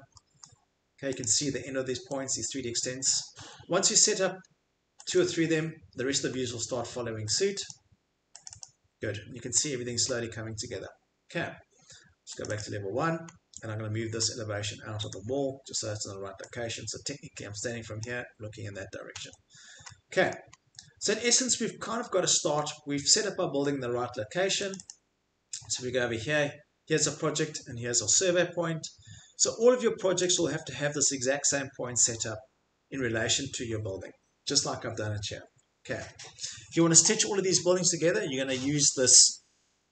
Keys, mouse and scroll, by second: 0.4-1.6 middle click, 1.2 click, 3.2 click, 3.3 Escape, 5.1 click, 5.3 click, 6.2 middle click, 7.3 click, 7.3 middle click, 7.6 click, 8.5 click, 8.6 click, 9.2 middle click, 9.2 middle click, 9.3 scroll, 10.1 scroll, 10.3 Escape, 12.4 click, 12.6 click, 13.3 scroll, 14.1 scroll, 15.1 click, 18.0 click, 19.1 Escape, 19.1 middle click, 20.3 middle click, 20.6 middle click, 20.6 middle click, 20.7 middle click, 22.2 middle click, 22.6 middle click, 22.7 middle click, 24.1 middle click, 24.7 click, 24.8 click, 25.9 middle click, 25.9 middle click, 27.7 middle click, 27.8 middle click, 30.4 click, 31.1 middle click, 33.7 Escape.